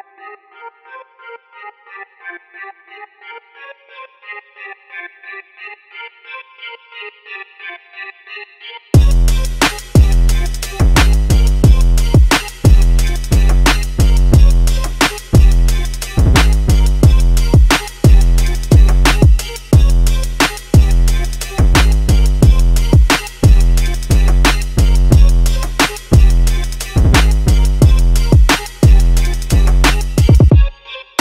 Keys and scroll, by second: 3.1-10.0 typing, 11.3-14.4 typing, 17.6 d, 18.6 d, 19.3 a.